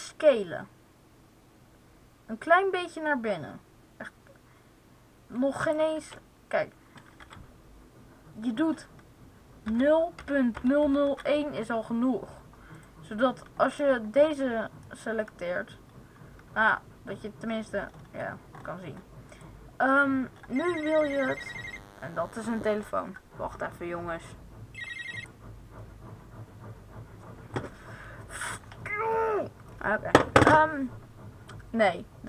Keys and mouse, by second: 0.1 s, 5.6-6.8 drag, 5.9 ctrl+z, 7.1 s, 12.7-13.7 right drag, 13.7-15.9 middle drag, 19.2-21.2 right drag.